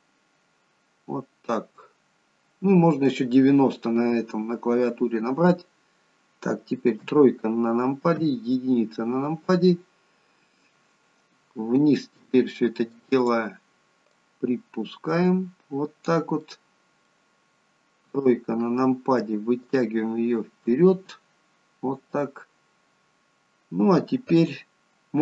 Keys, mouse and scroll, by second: 7.0 KP_3, 8.2 KP_1, 9.5-11.0 scroll down 3, 12.9 click, 13.2 click, 16.4 middle click, 18.0 KP_3, 19.6 click.